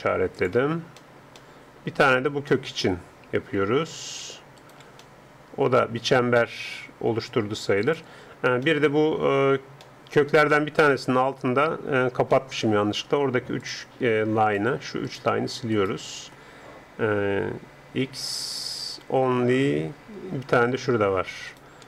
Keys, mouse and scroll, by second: 0.3-2.2 drag, 2.2-3.3 middle drag, 3.3 a, 3.6 a, 3.9 a, 4.6 right click, 5.1-6.5 middle drag, 7.8-9.9 drag, 8.6 middle click, 9.9-13.7 middle drag, 13.7-15.5 drag, 14.5-17.9 right drag, 18.1 x, 21.5-21.8 right drag.